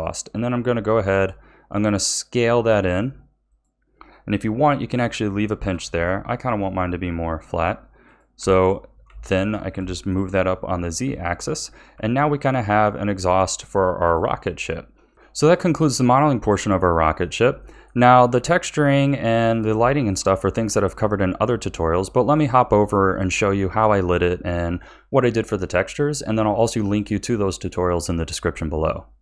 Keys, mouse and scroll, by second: 0.3 s, 5.6 g, 8.4 a, 8.8-9.2 scroll down 1, 9.2-11.0 shift+middle drag, 11.0 Tab, 11.6 scroll down 4, 11.9 a, 12.8-15.1 middle drag, 15.5-25.7 middle drag.